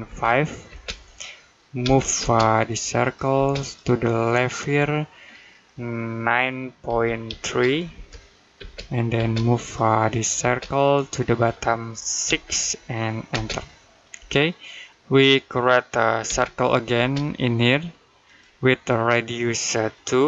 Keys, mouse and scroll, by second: 0.0-0.5 typing, 1.6 m, 2.0 space, 2.5 click, 3.2 space, 3.4 click, 6.7 9, 8.1-8.9 typing, 9.5 click, 10.2 space, 10.6 click, 12.1 6, 13.1 space, 16.1 c, 16.8 space, 18.1 click, 20.1 2.